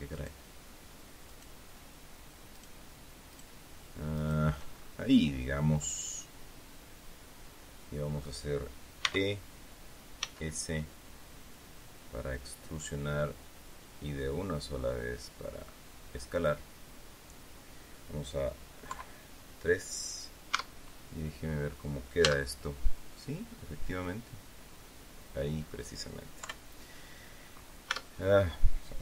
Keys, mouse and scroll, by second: 0.0 shift+right click, 1.2 shift+right click, 2.5 shift+right click, 3.2 shift+right click, 4.1 shift+right click, 4.6-4.9 shift+scroll down 2, 5.1-8.3 drag, 8.9 e, 10.1 s, 16.2 click, 18.8 KP_3, 20.4 Tab, 22.1 z, 23.0-25.8 middle drag, 26.3 KP_3, 27.8 Tab.